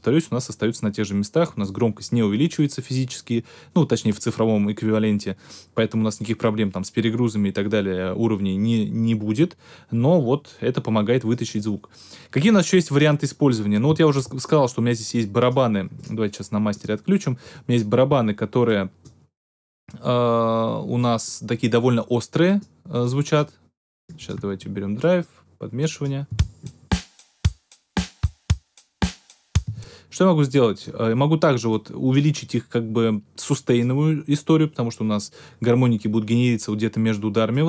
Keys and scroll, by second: 26.2 space, 29.6 space.